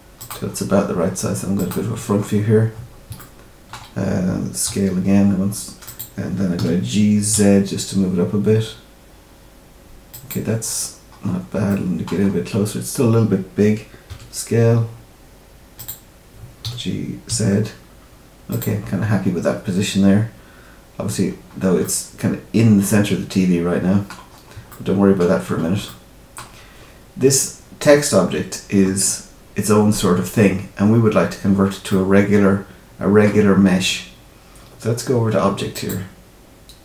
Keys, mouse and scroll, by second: 0.4-1.5 scroll up 2, 1.5 click, 1.5 scroll up 1, 2.1-2.5 scroll up 3, 2.7-3.0 scroll up 2, 3.1 shift+middle click, 4.6 s, 6.5 g, 10.8-11.5 scroll up 4, 11.6 shift+middle click, 12.1-12.5 scroll up 2, 14.0 s, 16.6 g, 19.3-19.6 scroll down 1, 20.3-21.4 scroll down 1, 21.4-21.8 scroll down 4, 21.8 middle click, 24.2 scroll up 2, 24.6 shift+middle click, 25.4 scroll up 2, 25.8 middle click, 26.5-27.2 scroll down 2, 31.4-31.8 scroll up 2, 31.8 middle click, 35.7 click.